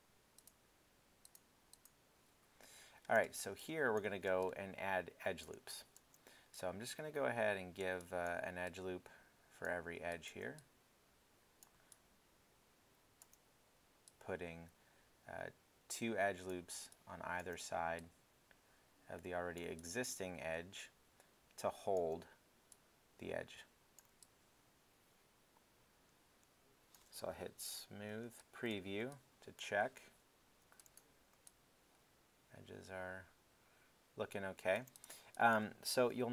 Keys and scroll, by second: 3.2 alt+f, 4.2 alt+shift+f, 27.9 alt+3, 28.2 alt+3, 30.6 alt+w, 31.3 alt+w, 35.9 alt+1.